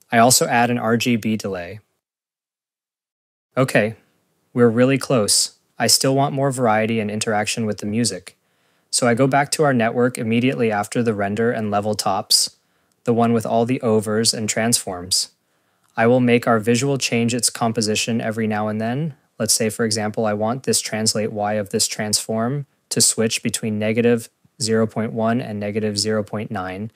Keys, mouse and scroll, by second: 0.4 click, 1.4 click, 2.0 click, 2.0 click, 2.1 scroll, 2.4 click, 2.5 click, 2.9 click, 4.2 click, 18.0 click, 25.9 scroll, 25.9 click, 26.3 click, 26.5 Tab.